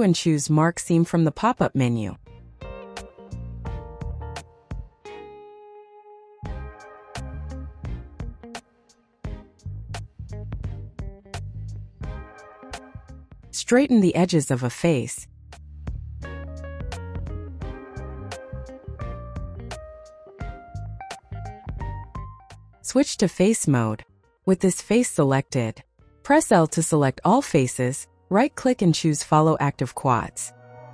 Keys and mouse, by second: 1.1 click, 5.3 3, 6.0 a, 6.6 u, 13.1 s, 13.4 y, 13.7 KP_0, 13.9 KP_Enter, 16.1 s, 16.5 y, 16.7 KP_0, 16.9 KP_Enter, 18.2 click, 19.1 s, 19.4 x, 19.6 KP_0, 19.9 KP_Enter, 21.2 click, 22.9 s, 23.2 x, 23.4 KP_0, 23.6 KP_Enter, 25.3 3, 25.7 click, 26.9 l, 27.9 click.